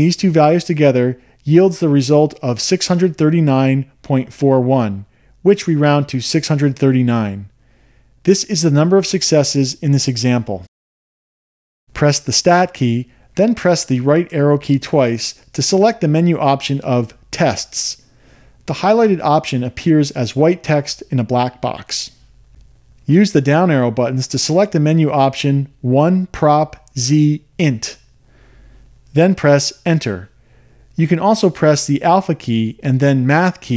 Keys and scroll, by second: 1.3 Return, 15.4 Right, 16.6 Right, 21.5 Down, 22.1 Down, 23.4 Down, 23.8 Down, 24.6 Down, 25.2 Down, 25.9 Down, 26.4 Down, 27.1 Down, 27.4 Down, 29.0 Up, 31.1 Return.